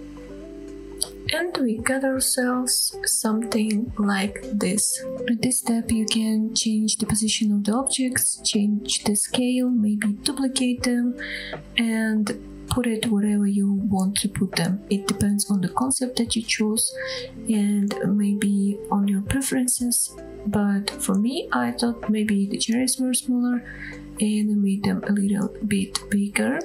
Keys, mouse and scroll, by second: 0.0 ctrl+l, 2.4 click, 3.4 scroll down 1, 3.7-4.6 middle drag, 4.8 scroll up 3, 5.0 shift+middle click, 5.0 scroll down 3, 5.1-7.5 typing, 5.2-5.6 scroll up 4, 5.4 shift+middle click, 6.0 click, 7.1-7.4 drag, 8.6 click, 8.8 g, 9.7 drag, 9.9 scroll down 1, 10.1 middle drag, 10.4-10.8 scroll up 2, 10.5 middle drag, 10.9 g, 11.1 z, 11.5 shift+click, 11.6 middle click, 12.1-12.7 scroll down 4, 12.2 middle click, 12.4 click, 12.7 shift+middle click, 13.1 scroll down 1, 13.2 middle click, 13.5-13.9 scroll up 3, 13.9 scroll down 1, 14.1 middle click, 14.1 scroll down 1, 17.3-17.7 scroll up 4, 17.4 middle click, 17.7-18.1 shift+middle drag, 18.1 click, 18.5 shift+click, 18.7 shift+middle click, 19.0 s, 19.9 click, 20.0 scroll up 2, 20.1 shift+middle click, 20.3 middle click, 20.4 g, 20.6 z, 21.6 shift+click, 21.8 scroll down 1, 21.9-22.6 middle drag, 22.6 g, 22.8 z, 23.9 shift+drag, 23.9 middle click, 24.1 drag, 24.2 scroll up 2, 24.6 g, 24.7 z, 25.4 scroll down 2, 25.5 middle click, 25.7 click, 26.2 scroll down 1, 26.3-26.6 shift+middle drag.